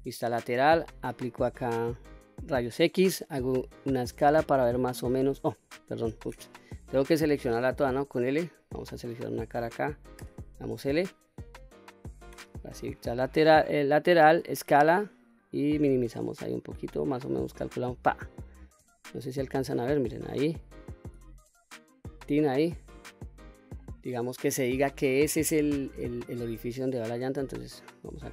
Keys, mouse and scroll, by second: 0.6 q, 2.9 s, 5.2 click, 6.0 ctrl+z, 6.4 middle click, 7.7 l, 8.8 click, 10.1 l, 12.2 KP_3, 14.3 s, 17.7 click, 18.7 q, 21.0 s, 21.9 click, 22.3-23.7 middle drag, 24.4-25.9 middle drag, 26.6-28.3 drag.